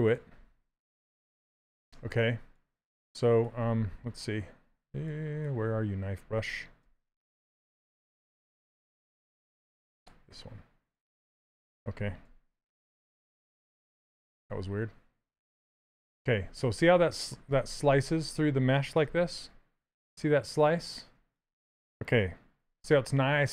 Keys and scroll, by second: 6.5 b, 7.6 k, 12.6 ctrl+z, 13.6 ctrl+z, 15.5 shift+space, 17.7 shift+d, 19.4 shift+f.